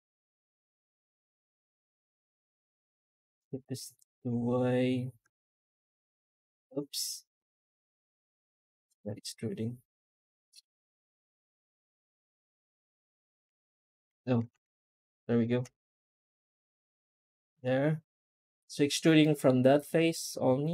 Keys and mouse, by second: 13.3 Tab, 14.3 Tab, 19.1 middle click, 20.6 F9.